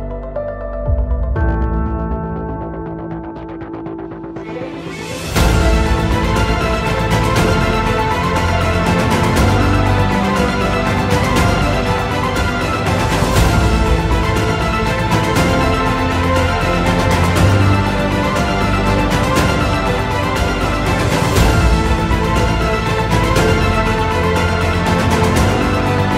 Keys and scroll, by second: 1.9 F2, 9.3 KP_Add, 10.0 alt+c, 15.3 space, 15.8 Escape, 16.7 Escape, 18.1 F2, 24.7 Escape, 25.0 F4.